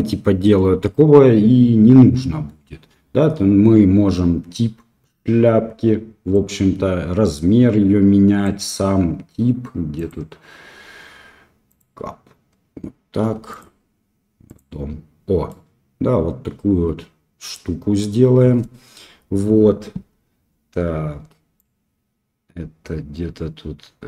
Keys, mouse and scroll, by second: 6.4-11.9 drag, 13.5-14.7 drag, 15.4-17.5 middle drag, 21.5-24.0 drag.